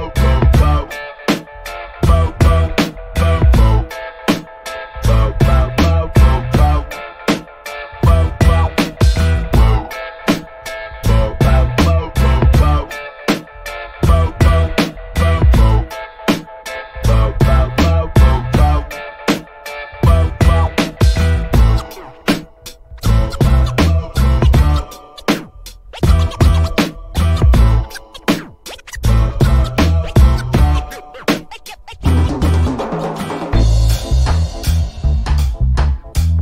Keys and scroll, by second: 26.6 a, 30.6 i, 34.5 i.